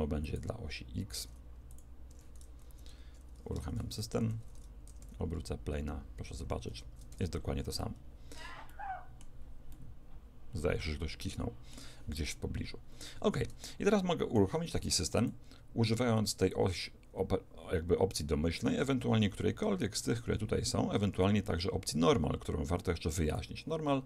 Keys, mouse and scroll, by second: 0.3 click, 2.1 Escape, 3.5 alt+a, 4.9 r, 7.1 Escape, 7.8-11.5 middle drag, 13.7-15.2 middle drag, 15.2 click.